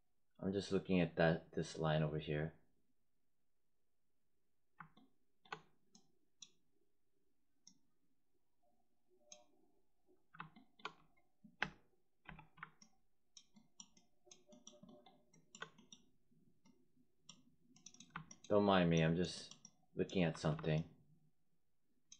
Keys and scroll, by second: 20.2 4.